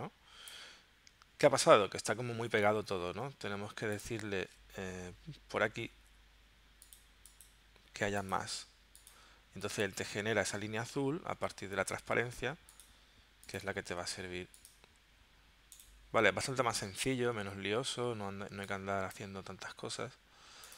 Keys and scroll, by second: 17.3 w.